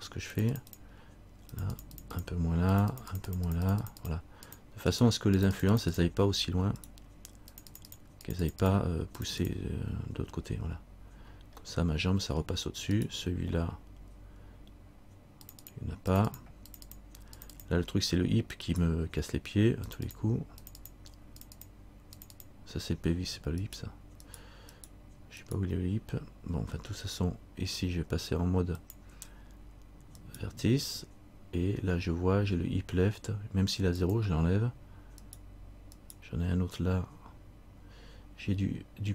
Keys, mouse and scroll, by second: 0.5-2.3 click, 3.2-5.1 click, 5.1 right click, 5.5 click, 7.0 right click, 7.7 click, 8.1 click, 8.7 click, 9.5 click, 11.9 middle click, 13.1 right click, 15.6 click, 15.9 click, 18.9 right click, 20.0 click, 21.1 click, 22.3 click, 23.8 click, 23.8 right click, 29.0 click, 30.4 right click, 34.2 click, 35.4 right click.